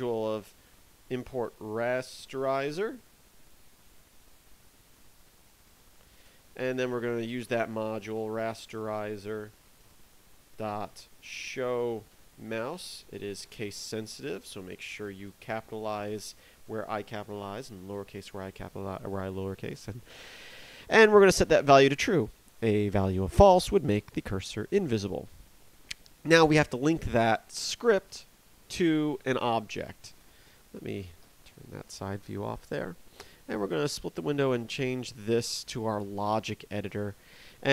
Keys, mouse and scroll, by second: 0.5-1.4 typing, 4.9 i, 5.1 z, 5.6 e, 5.7 r, 6.1 Return, 6.2 Return, 7.3-13.3 typing, 14.0 Left, 16.0 shift+t, 17.1 r, 17.2 u, 17.3 e, 19.7 click, 24.3 click, 28.0 right click, 31.2 t, 36.9 t.